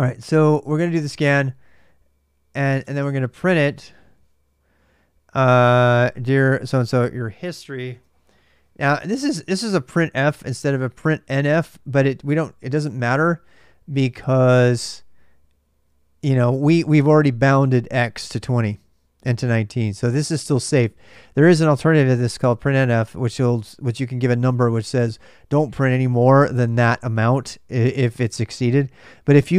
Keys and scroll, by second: 0.0-1.5 typing, 2.6 super+Tab, 2.6 typing, 7.7 super+Tab, 9.0 super+Tab, 10.1 super+Tab.